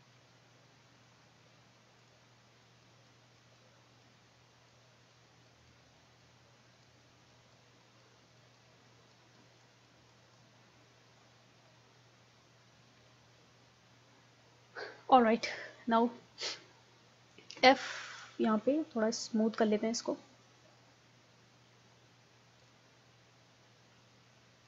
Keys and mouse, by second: 2.0-11.9 drag, 17.6 f, 22.8 click.